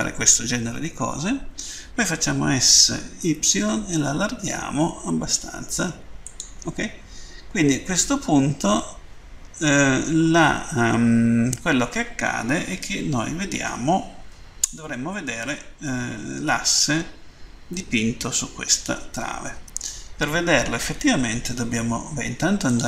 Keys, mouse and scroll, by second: 6.0 click, 7.2 scroll down 1, 17.5 middle click, 22.6 click.